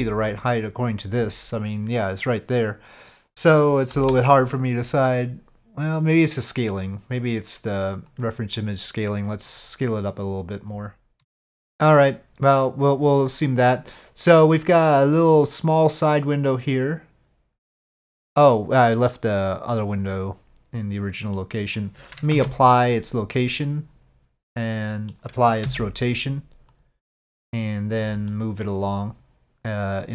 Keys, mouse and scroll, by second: 3.9 KP_5, 4.1 KP_7, 8.1 click, 17.6-19.0 middle drag, 19.9 click, 21.3-21.8 middle drag, 22.3 ctrl+a, 24.4-25.1 middle drag, 25.6 ctrl+a, 28.3 middle click.